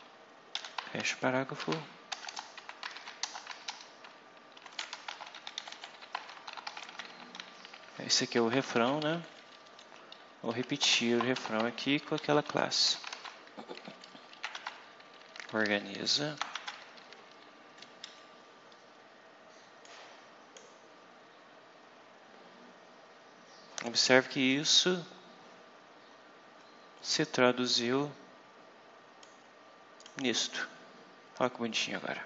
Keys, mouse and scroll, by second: 0.4 /, 0.9 shift+p, 2.0-8.6 typing, 3.1 Return, 8.1 Right, 9.1 shift+Down, 10.0 shift+Up, 10.4 shift+End, 10.7 shift+Return, 11.2 shift+BackSpace, 12.0 shift+/, 12.8 p, 13.1 shift+., 13.5 shift+Up, 14.4 shift+Tab, 14.6 shift+Up, 16.5 shift+Tab, 16.7 shift+Up, 17.8 shift+Down, 19.7 click, 20.8-21.4 scroll up 2, 21.4-22.2 scroll up 2, 22.4-22.7 scroll up 2, 23.0 scroll up 2, 24.6-25.0 scroll down 2, 25.2-26.2 scroll down 6, 26.7 scroll down 2, 27.3-27.8 scroll up 2, 29.1 click, 30.6-30.9 scroll down 2, 31.3-31.8 scroll down 2.